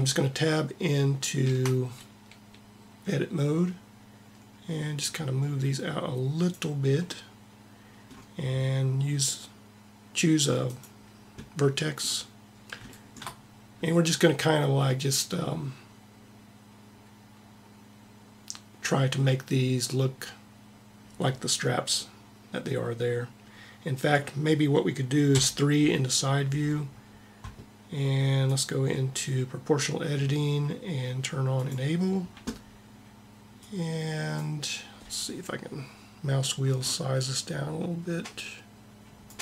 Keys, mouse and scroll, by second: 1.4 Tab, 5.1-6.6 drag, 10.7-13.3 drag, 19.3-20.9 middle drag, 22.0-23.6 middle drag, 25.4 KP_3, 33.6-36.9 drag, 36.9 scroll down 1.